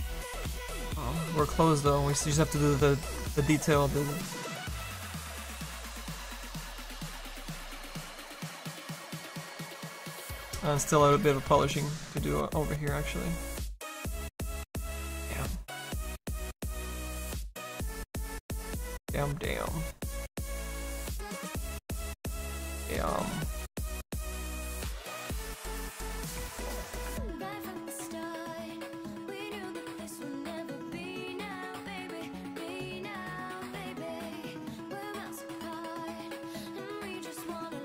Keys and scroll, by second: 5.2 Return.